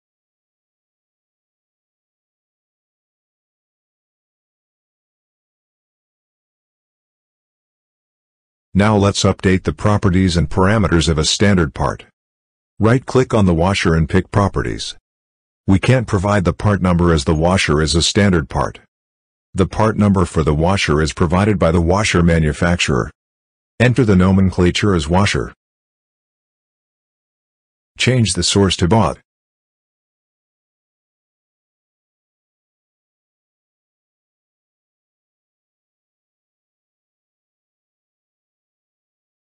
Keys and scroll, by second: 23.9-25.2 typing.